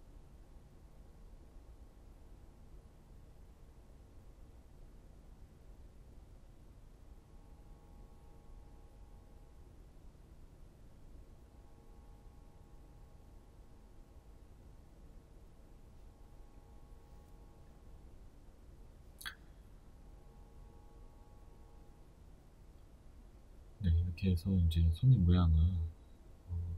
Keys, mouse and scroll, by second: 0.8 alt+shift+right click, 1.4-10.6 middle drag, 6.0 shift+e, 10.6 click, 10.8 middle click, 11.2 scroll, 12.3-14.8 middle drag, 12.3 scroll, 13.0 Tab, 13.3-13.8 scroll down 2, 14.5 scroll up 2, 15.5 scroll down 1, 15.8-20.3 middle drag, 19.4 KP_1, 22.0 Tab, 22.7 a, 25.0 alt+s.